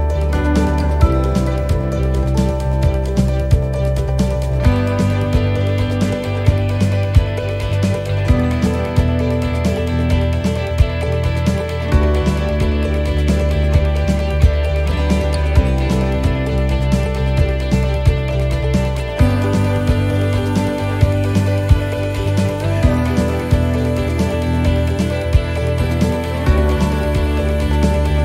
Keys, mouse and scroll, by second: 1.1 s, 6.4 middle click, 7.1 shift+middle click, 8.2 click, 10.4 middle click, 12.1-16.4 l, 16.4 click, 17.2 l, 18.2 click, 18.8-19.4 scroll down 1, 19.4 scroll down 1, 19.5 scroll up 1, 20.7 l, 21.2 l, 21.8 l, 22.5 l, 24.1 click, 25.0 l, 27.7 click.